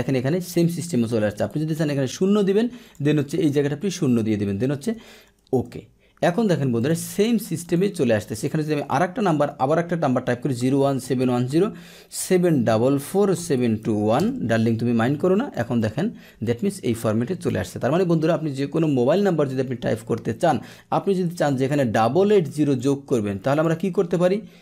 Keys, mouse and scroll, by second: 1.5 ctrl+1, 2.8 click, 4.9 Delete, 5.4 Return, 5.6 Return, 6.7 click, 7.5 click, 8.3 click, 14.1 Return, 16.4 click, 16.9-17.4 drag, 21.3 ctrl+1, 22.7 click, 23.4 click.